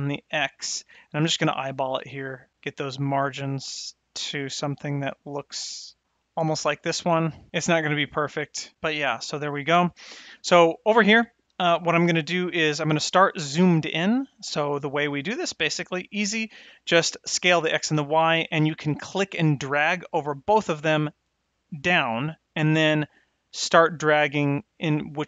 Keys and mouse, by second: 10.8 click, 19.7-24.8 drag, 24.8-25.2 middle drag.